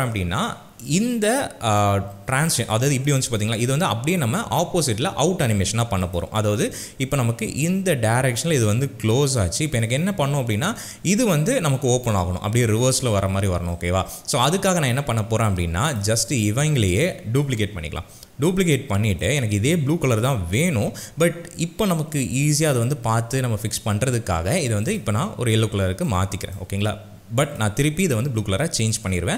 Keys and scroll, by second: 17.8 ctrl+shift+d.